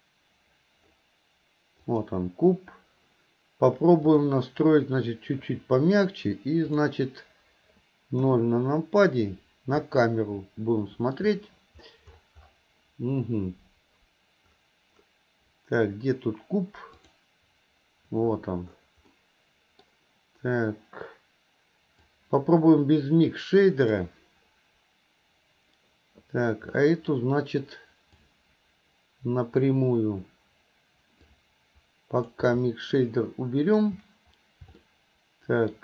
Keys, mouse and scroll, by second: 1.8 click.